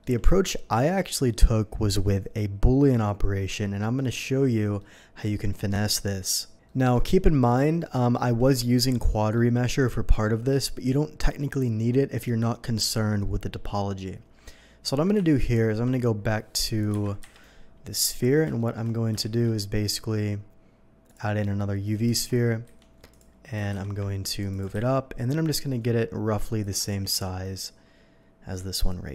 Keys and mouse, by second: 9.4-16.3 shift+drag, 15.3 ctrl+z, 15.9 ctrl+z, 16.7 click, 16.9 Delete, 17.2 KP_3, 18.4 shift+Delete, 19.2 shift+a, 22.0 ctrl+2, 22.6 ctrl+a, 23.0-29.1 drag, 23.5 g, 23.7 z, 24.7 s, 26.8 g, 27.1 z, 27.3 g.